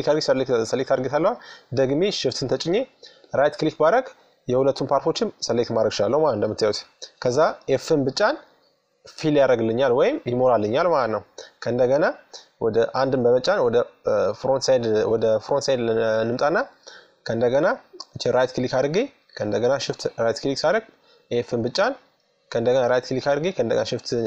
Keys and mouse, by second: 1.8-3.4 right drag, 3.4-4.9 middle drag, 5.2-6.9 middle drag, 6.9 f, 10.3 KP_3, 11.4 KP_1, 12.8-14.5 middle drag, 14.6 middle click, 15.0 middle click, 15.9-17.0 middle drag, 17.0-20.3 right drag, 19.6 f, 20.4 middle click, 21.3-24.1 right drag, 23.7 f, 24.1-24.2 middle drag.